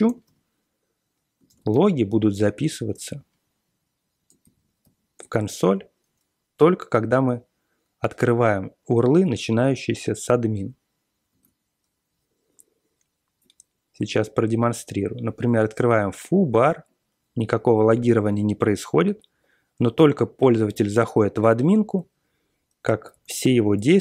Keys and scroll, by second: 0.2 v, 1.4 ctrl+x, 1.7 1, 2.3 alt+p, 2.9 Return, 4.8 ctrl+l, 5.4 Return, 5.7 Return, 10.4 super+Tab, 11.3 super+Tab, 23.1 super+l, 23.4-24.0 typing.